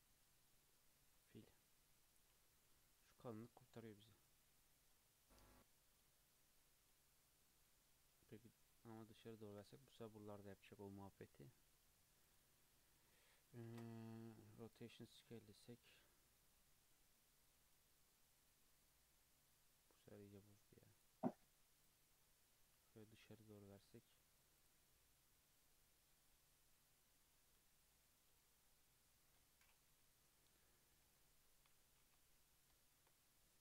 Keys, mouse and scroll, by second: 1.9-2.3 scroll down 3, 2.5 Tab, 2.7-3.3 middle drag, 3.3 click, 3.6 middle drag, 3.9 scroll up 2, 4.2 middle click, 5.0 scroll up 1, 5.5 middle click, 6.2-6.7 scroll down 2, 6.7 middle click, 6.9-7.4 scroll up 2, 7.4-12.3 middle drag, 12.3 click, 12.7-13.1 middle drag, 13.1 scroll down 2, 13.3 middle click, 13.7 ctrl+a, 15.2-17.0 middle drag, 17.0-17.4 scroll up 1, 17.6-18.3 middle drag, 18.3-18.8 scroll up 1, 20.9-22.8 drag, 22.8 scroll down 2, 23.1-23.9 middle drag, 23.9-24.6 scroll up 1, 24.6 click, 24.8-26.3 middle drag, 26.3-27.0 scroll up 2, 27.1-27.6 middle drag, 27.6-27.9 scroll down 2, 27.9-28.6 middle drag, 28.6 scroll down 2, 28.7-30.1 middle drag, 30.1 KP_3, 30.4-30.8 scroll up 3, 31.0 Tab, 31.7 3, 32.0 alt+z, 32.4-32.8 scroll up 1.